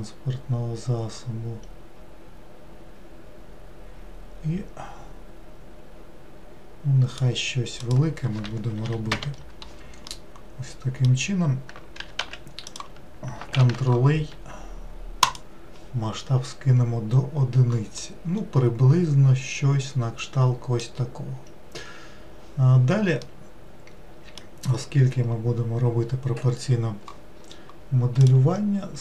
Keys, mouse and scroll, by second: 7.8-10.1 drag, 10.1-12.0 middle drag, 12.0 g, 13.6 ctrl+a, 17.9-21.1 middle drag, 23.2-26.4 middle drag, 28.2-29.0 drag.